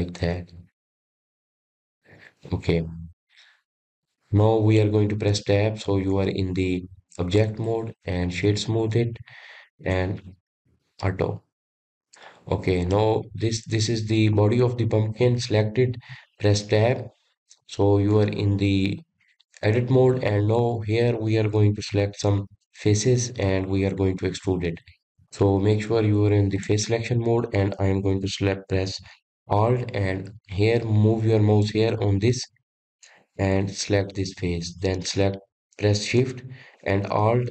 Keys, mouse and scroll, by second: 1.8 s, 3.9-4.3 scroll down 1, 4.3 click, 4.8-5.4 scroll down 3, 5.4-6.5 middle drag, 6.5 Tab, 7.0-7.6 scroll down 4, 7.6-8.9 middle drag, 9.5 right click, 9.9-11.1 scroll up 3, 11.1 click, 11.5 click, 12.1 scroll up 1, 12.2-13.4 middle drag, 13.4-13.8 scroll down 4, 14.0 scroll up 1, 14.1-15.6 middle drag, 15.6 click, 18.1 Tab, 18.8 scroll down 1, 19.3-22.0 middle drag, 22.0-22.9 scroll up 2, 22.9-26.0 shift+middle drag, 27.8 click, 28.5 scroll up 1, 34.8 alt+click.